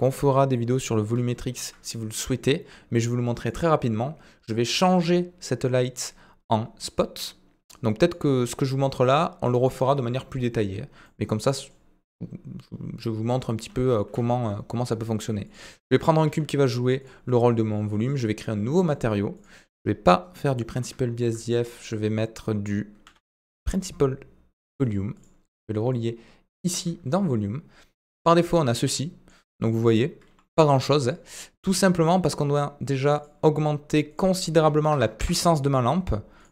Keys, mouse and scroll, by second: 1.3 shift+a, 3.5 click, 6.0 click, 6.8 click, 8.1-9.7 drag, 11.0-11.8 middle drag, 13.9 shift+a, 15.8 middle drag, 16.2 s, 18.1 click, 18.7 middle click, 19.3 click, 20.7 Delete, 21.0 shift+a, 24.9-25.6 typing, 25.9-26.8 drag, 28.2-29.4 middle drag, 30.3 g, 33.2-35.6 drag, 36.4-36.5 drag.